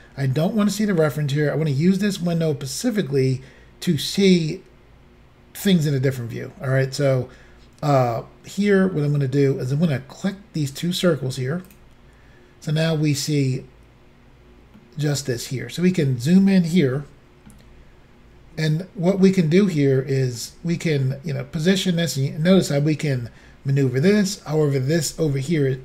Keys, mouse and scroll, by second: 9.0 middle click, 11.7 click, 14.8 middle click, 15.8 scroll up 2, 17.0 shift+middle click, 17.9 scroll up 2, 18.5-18.9 scroll down 3, 19.2 middle click, 20.7 shift+middle click, 21.3-21.7 scroll up 2, 22.9 middle click.